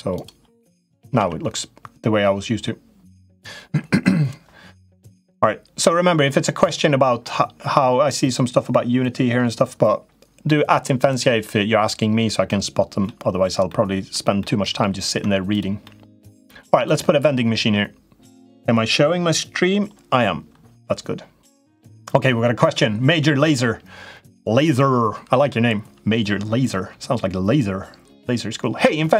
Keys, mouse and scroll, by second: 0.9 Tab, 12.2 middle click, 13.4 middle click, 14.1 middle click, 14.9 Tab, 15.3 click, 15.6 middle click.